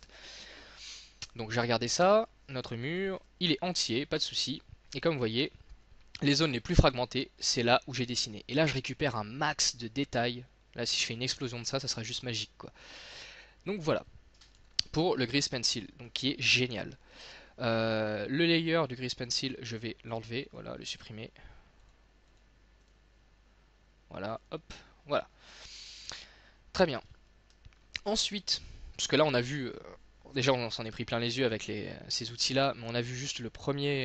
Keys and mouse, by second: 2.3-3.9 drag, 3.3 z, 3.9 middle click, 10.6 middle click, 11.1 click, 12.4 middle click, 14.7 x, 18.6-22.7 drag, 22.9-25.7 middle drag, 26.3 middle click, 27.6 shift+middle click.